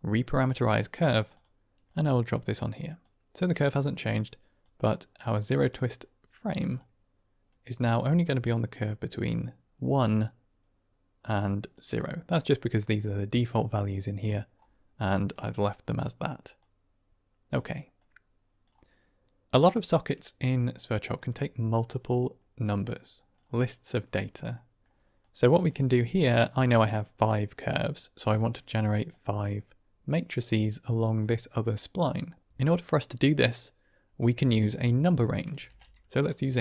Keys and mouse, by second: 1.8-3.0 drag, 3.8 middle click, 4.5 click, 6.7-11.6 shift+drag, 12.2-14.1 drag, 15.5-16.1 drag, 16.7 click, 17.9 click, 19.7-23.4 drag, 24.5 middle click, 24.6 click, 25.2 click, 26.1 click, 28.4 click, 29.0-31.1 drag, 35.5 shift+a.